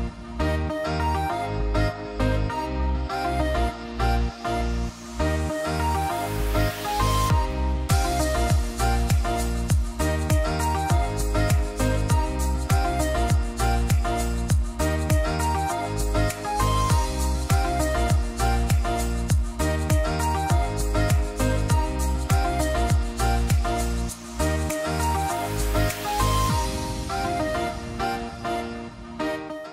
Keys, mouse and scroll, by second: 2.5 click, 4.5 alt+scroll down 1, 5.4 ctrl+space, 6.5 alt+click, 8.1 Return, 11.8-12.4 drag, 21.6 click.